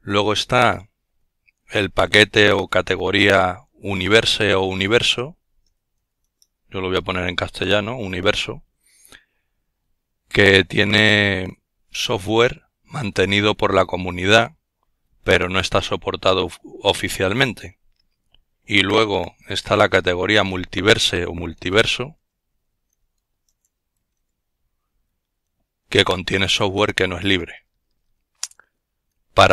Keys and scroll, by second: 1.5-4.3 typing, 18.0-21.2 typing.